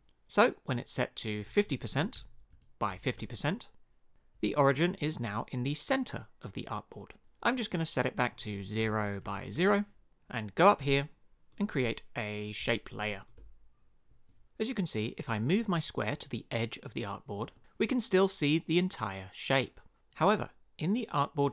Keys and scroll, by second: 1.7-3.5 typing, 8.8 0, 9.2 Tab, 9.4 0, 9.5 Return.